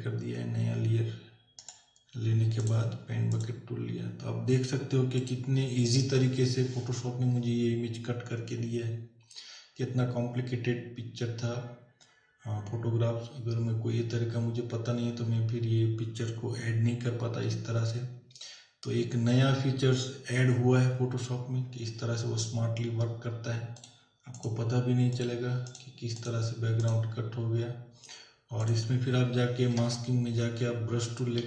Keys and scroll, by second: 29.8 b.